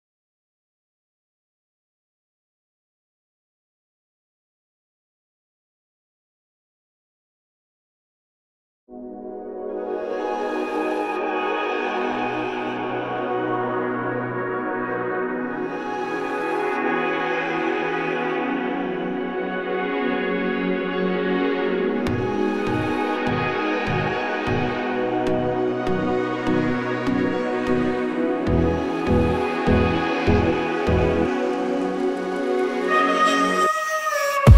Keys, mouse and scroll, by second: 0.9 click, 3.5 2, 4.7 alt+click, 5.8 g, 8.6 g, 13.4 click, 13.4 KP_3, 16.9-17.9 drag, 18.0 g, 22.2 click, 22.6 g, 25.1-26.1 scroll up 2, 26.1 scroll up 1, 26.2-27.2 scroll down 2, 27.2-27.8 scroll down 1, 27.8-28.8 scroll up 2, 28.8-30.5 shift+middle drag, 30.5 click, 30.7 click, 31.2-31.8 scroll down 1, 31.8 click, 32.6-33.4 scroll down 1, 33.7 click.